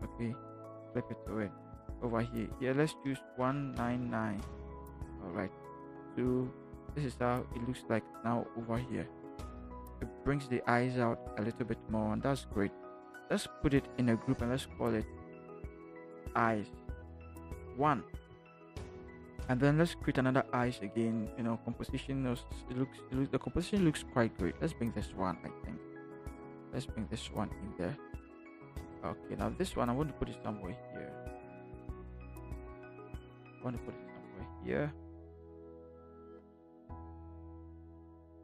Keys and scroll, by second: 3.4-4.0 typing, 14.8 ctrl+shift+g, 16.2-18.1 typing.